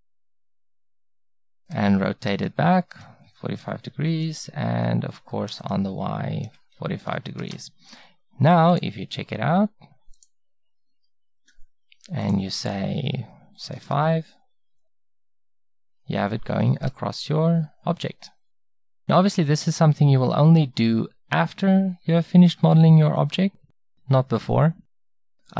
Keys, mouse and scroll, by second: 1.7 r, 5.2 r, 10.6-11.9 middle drag, 12.3-14.2 middle drag, 15.2-22.5 middle drag.